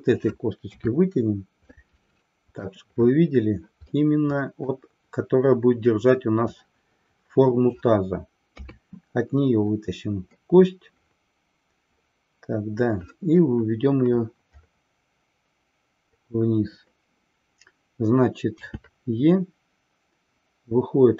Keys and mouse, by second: 0.7 KP_3, 1.8-2.8 middle drag, 4.1-4.7 middle drag, 8.5 KP_3.